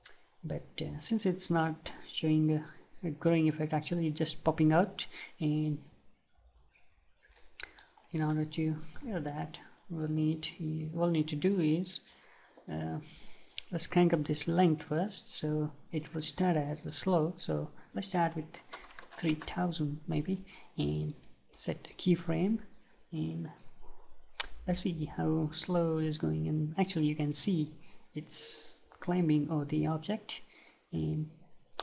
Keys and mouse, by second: 1.8-8.0 right drag, 8.0-11.0 middle drag, 16.1-19.4 drag, 21.1-25.2 right drag.